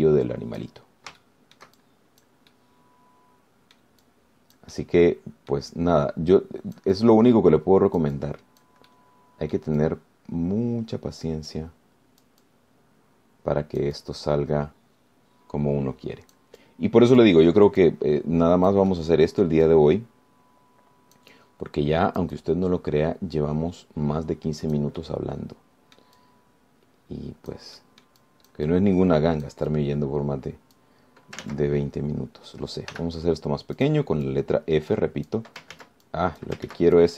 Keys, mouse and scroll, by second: 0.6 click, 1.1 middle click, 2.4 shift+click, 3.3 click, 3.7-5.2 middle drag, 5.3 click, 5.9 middle click, 6.5 scroll down 2, 6.9-10.0 drag, 10.1 middle click, 11.0-17.7 drag, 17.8 click, 19.0-20.9 drag, 22.4-26.1 drag, 26.2-28.9 drag, 29.0-30.9 drag, 32.7 ctrl+z, 34.1 f, 35.0 click, 35.5-36.7 drag, 36.9 ctrl+z.